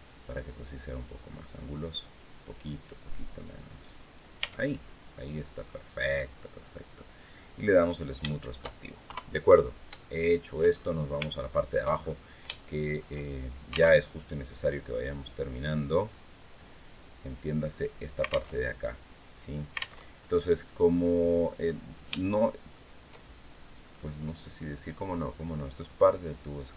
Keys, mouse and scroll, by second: 4.2 Tab, 4.5 scroll down 1, 4.9 middle click, 7.0 click, 7.5-7.8 scroll down 1, 8.0 shift+middle click, 8.8 shift+KP_3, 9.4 scroll down 1, 9.8 shift+middle click, 10.5-10.9 shift+scroll up 1, 11.1 shift+middle click, 11.7-12.0 shift+scroll up 1, 12.4 shift+middle click, 13.0 shift+scroll down 1, 13.7 alt+Tab, 14.4-14.8 scroll down 1, 15.2-16.3 drag, 16.4 click, 18.3 alt+Tab, 19.2 scroll down 2, 19.7 alt+Tab, 20.8 scroll down 2, 21.4 scroll up 2, 21.9 shift+middle click, 23.1-25.4 shift+drag, 25.9-26.4 scroll down 2.